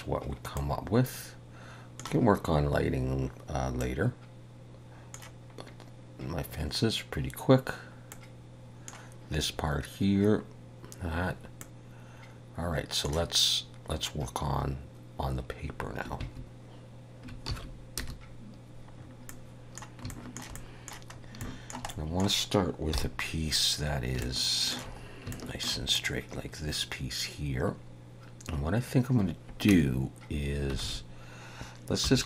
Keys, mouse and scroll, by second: 17.6 ctrl+s, 18.0 KP_0, 19.0-19.8 scroll up 3, 19.4 middle click, 20.2 shift+middle click, 20.6 middle click, 21.2 scroll up 1, 21.5 shift+middle click, 22.0 middle click, 23.0 KP_7, 24.0-24.3 scroll up 2, 24.3 shift+middle click, 25.1 scroll up 2, 25.4 shift+middle click, 26.0 click, 27.9 scroll up 1, 29.8 Tab, 30.9 alt+a, 32.1 3.